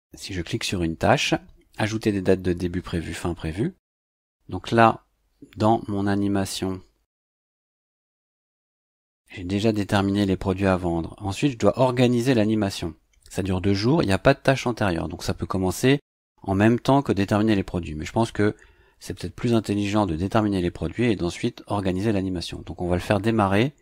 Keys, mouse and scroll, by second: 7.3 click, 8.5-9.2 scroll down 4.